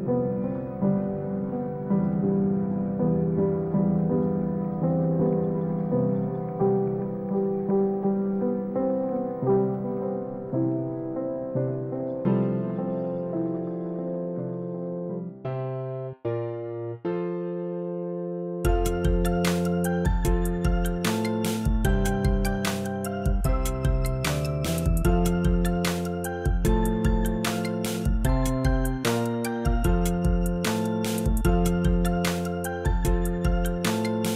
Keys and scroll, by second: 0.7 space, 1.4 8, 3.7 0, 4.2 x, 5.6 1, 6.0 0, 6.7 0.